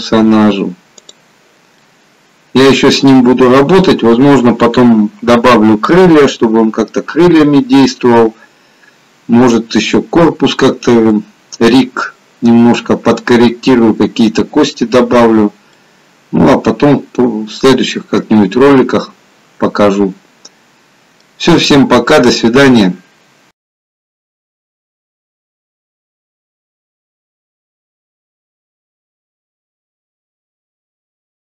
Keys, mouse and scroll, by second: 1.1 click, 2.1 middle click, 11.2 middle click, 15.9 middle click.